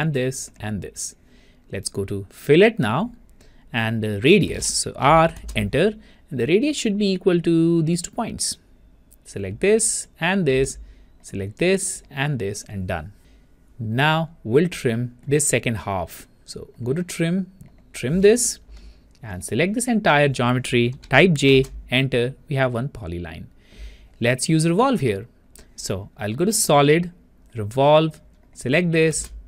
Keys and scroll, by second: 21.5 Return, 21.5 j.